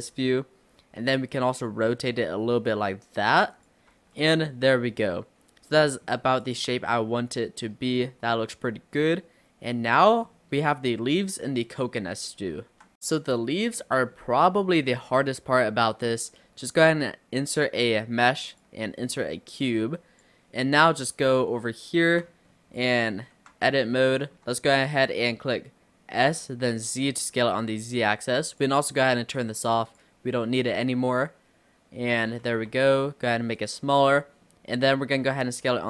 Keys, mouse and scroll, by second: 0.2-1.4 scroll down 5, 1.4 r, 4.0 Tab, 4.2-6.1 middle drag, 6.1-6.5 scroll up 2, 6.5 click, 6.8 scroll up 1, 6.8-9.7 middle drag, 9.7-10.1 scroll down 3, 10.1 middle drag, 10.3-10.7 scroll up 2, 13.0-14.9 middle drag, 14.9 shift+a, 19.0-19.7 scroll up 1, 19.7 click, 20.9 click, 21.6-22.5 shift+middle drag, 22.5-23.4 scroll up 4, 23.4 Tab, 24.0-26.2 shift+middle drag, 26.2 s, 29.8 click, 30.6-32.3 middle drag, 32.3 s, 33.9-35.3 middle drag, 35.3 s.